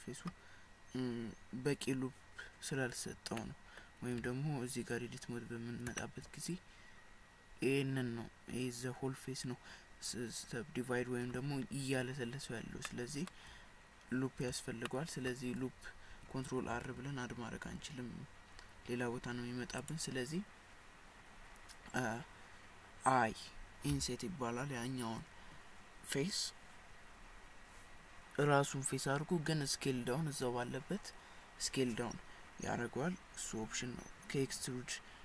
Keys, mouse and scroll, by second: 3.4 middle click, 4.3 Tab, 6.0 shift+middle click, 12.9 middle click, 14.7 shift+scroll up 1, 14.9 shift+middle click, 16.8 ctrl+r.